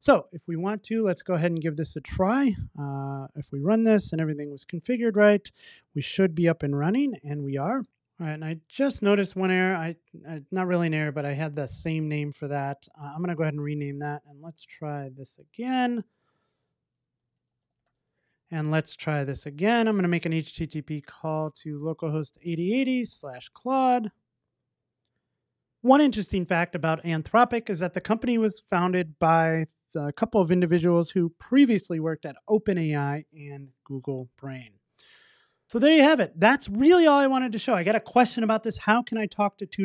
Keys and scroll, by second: 1.0 ctrl+r.